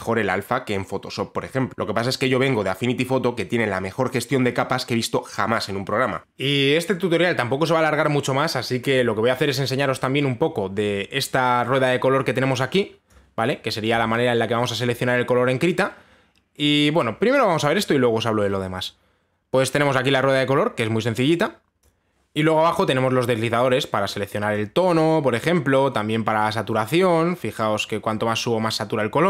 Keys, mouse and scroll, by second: 13.7-16.7 drag, 22.1-24.0 drag, 25.1-28.2 drag.